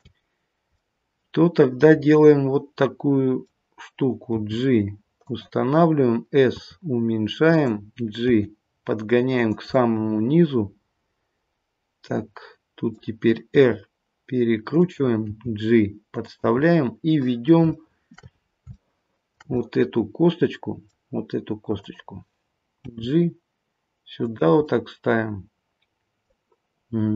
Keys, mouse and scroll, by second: 0.2-0.8 scroll up 1, 0.8 middle click, 1.9 middle click, 4.3 g, 6.4 s, 8.3 g, 9.7 middle click, 15.2 r, 15.2 g, 16.6 middle click, 17.7 shift+middle click, 18.3-18.9 scroll up 4, 18.7 shift+middle click, 19.5 middle click, 22.4 click, 22.8 g, 24.7 middle click.